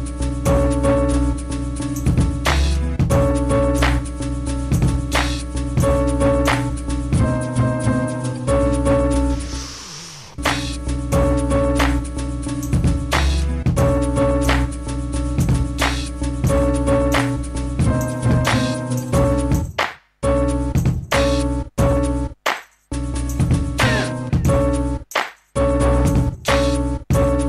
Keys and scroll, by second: 1.3 m, 3.2-4.8 typing, 7.2 space, 8.3 m, 9.0 BackSpace, 10.1 typing, 10.5 Return, 11.2 space, 12.4 m, 14.3 space, 17.1-17.6 typing, 19.4-21.7 typing, 22.9 m, 27.3-27.4 typing.